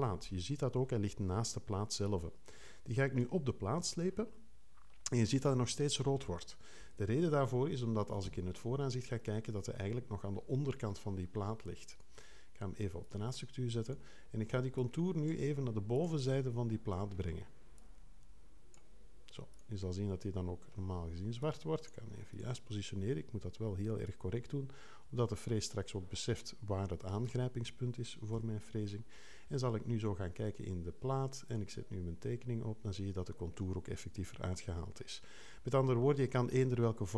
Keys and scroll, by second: 8.2 2, 28.3 3.